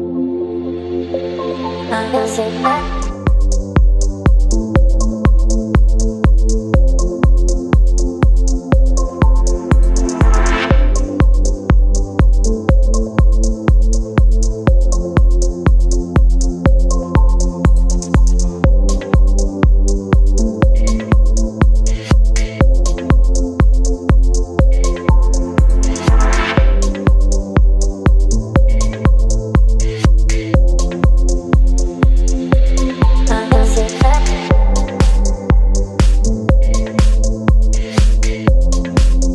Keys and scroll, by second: 16.6 KP_6, 26.1 space, 26.9 b, 31.4 ctrl+z, 32.8 ], 33.0 ], 33.1 ], 33.2 ], 38.9 space.